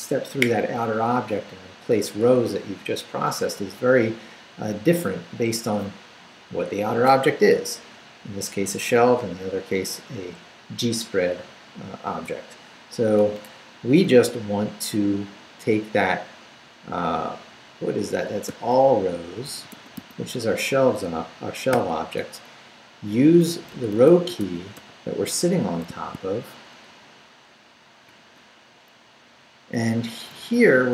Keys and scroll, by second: 18.0-20.4 typing, 21.7 [, 23.5-25.2 typing, 28.1 ], 29.9 Up, 30.3 Left.